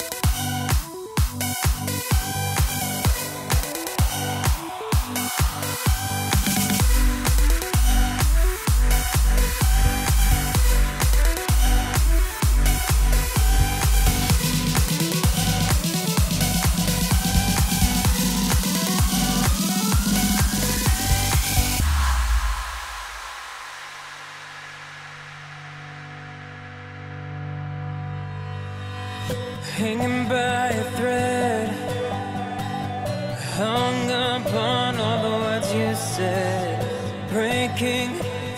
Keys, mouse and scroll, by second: 8.1-10.0 middle drag, 10.0 click, 11.1 click, 15.8 click, 19.0-21.1 drag, 23.5-28.5 drag, 28.5 i, 32.0 click.